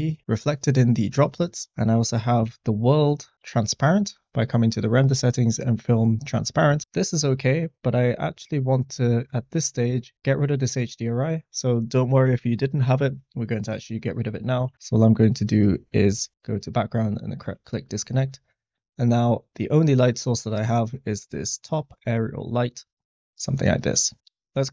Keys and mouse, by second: 8.6 click, 15.8-16.8 drag, 20.8 middle click, 21.5 middle click, 22.1 click, 23.1 s, 23.1 g, 23.1 z.